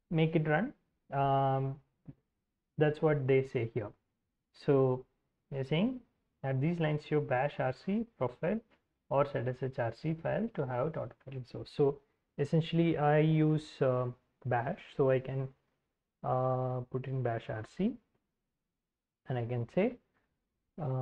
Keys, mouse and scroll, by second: 1.9 alt+Tab, 9.2-10.9 drag, 11.6 alt+Tab, 12.3-15.2 typing, 15.8 alt+Tab, 16.5 alt+Tab, 16.5-19.3 typing, 19.5 alt+Tab.